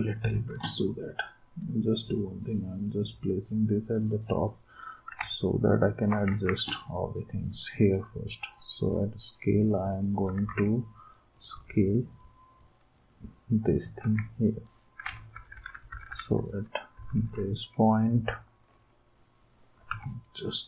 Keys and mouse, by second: 0.1 space, 6.3 ctrl+s, 10.5 ctrl+z, 14.0 ctrl+s, 15.3 Down, 15.5 Down, 15.7 Down, 15.9 Down, 16.1 Down, 16.9 Up, 17.1 Up, 17.4 Up.